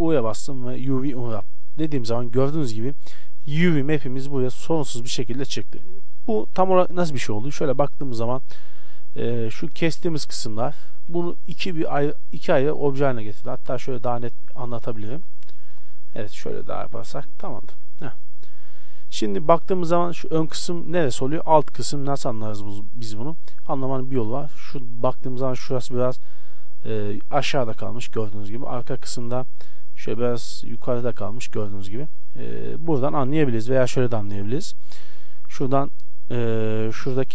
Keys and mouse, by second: 0.0 u, 5.9 KP_1, 13.1 Tab, 13.9 shift+a, 15.0 r, 16.7 s, 17.8 a, 18.4 right click, 18.6 Tab, 22.7 KP_1, 28.4-31.8 middle drag, 33.4 KP_1.